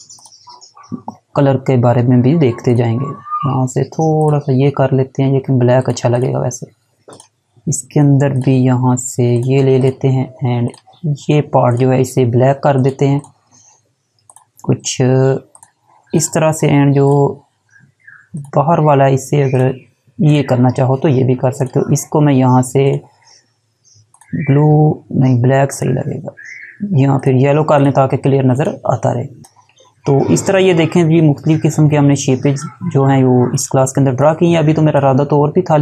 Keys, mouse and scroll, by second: 1.9 click, 29.9 alt+Num_Lock, 30.2 alt+scroll down 1, 31.2 alt+scroll down 1, 32.7 click.